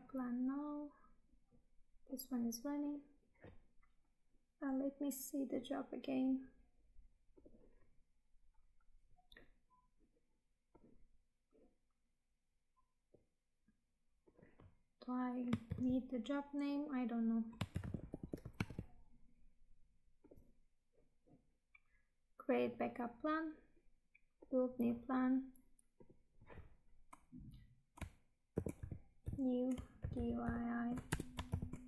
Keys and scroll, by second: 15.6 ctrl+c, 17.7 ctrl+v, 18.8 Tab.